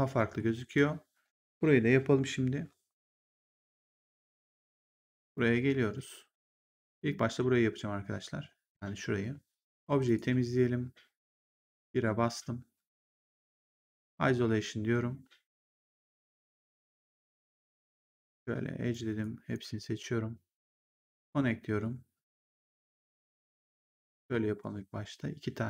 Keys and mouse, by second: 3.3 click, 6.5 click, 9.9 click, 11.2 click, 11.6 1, 13.8 ctrl+1, 17.6 right click, 19.1 click, 20.7 click, 21.7 middle click.